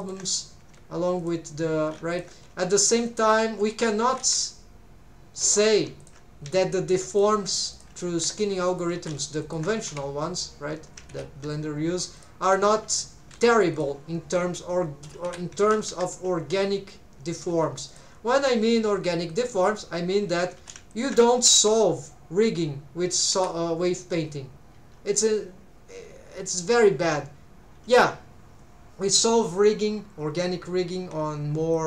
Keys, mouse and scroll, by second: 0.0 alt+shift+right click, 0.0 alt+shift+click, 0.6 g, 1.2 shift+click, 2.0 alt+a, 2.1 alt+shift+click, 2.5 g, 3.1 shift+click, 4.1 alt+a, 5.5 3, 6.0 alt+shift+click, 6.5 s, 7.1 shift+click, 7.3 g, 7.7 shift+click, 8.1 r, 8.7 click, 9.2 alt+a, 9.4 alt+shift+click, 9.8 g, 11.4 Escape, 12.2 alt+shift+click, 13.2 g, 13.7 shift+click, 14.3 r, 15.3 Escape, 15.6 alt+a, 15.9 r, 16.7-17.3 scroll down 1, 17.5 alt+a, 17.9 alt+shift+click, 18.3 g, 19.3 shift+click, 20.7 alt+a, 20.9 alt+shift+click, 21.6 r, 23.3 Escape, 31.7 click.